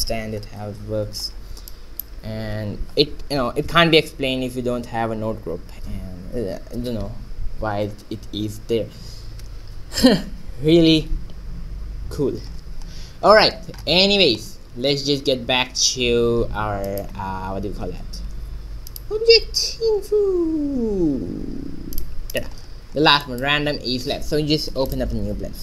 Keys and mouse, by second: 1.7-4.2 middle drag, 4.7 Tab, 13.1-14.3 middle drag, 14.3 shift+z, 15.5 shift+z, 18.4 shift+a, 23.2-25.3 drag, 25.3 ctrl+n.